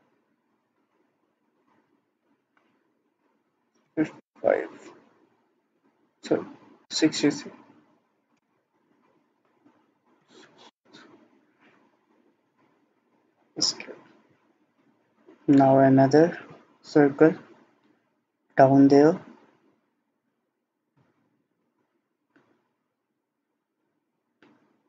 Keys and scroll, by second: 3.9 typing, 4.3 Return, 6.6-7.3 typing, 8.4 Return, 10.2 typing, 10.7 Return, 12.8 Escape.